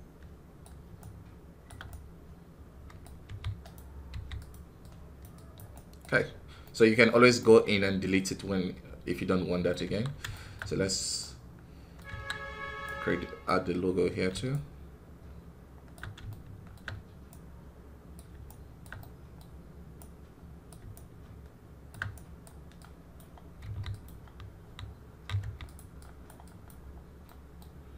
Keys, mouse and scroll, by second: 3.1 f, 4.0 f, 4.7 click, 5.6 right click, 6.1 scroll down 1, 6.5-10.4 middle drag, 10.4 scroll up 3, 11.1 middle click, 12.0 KP_1, 12.2 scroll down 3, 12.7-13.7 right drag, 13.7-14.4 scroll up 3, 14.4-16.2 shift+right drag, 16.2 shift+middle click, 17.1-18.9 right drag, 18.9 middle click, 19.8-23.0 right drag, 23.0 click, 23.5 f, 25.3 f, 26.1 click, 27.1-27.9 middle drag.